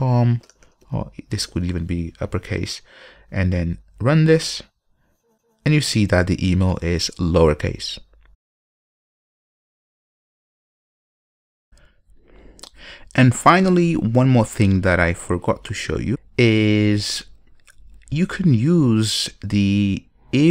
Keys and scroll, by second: 3.8 ctrl+F5.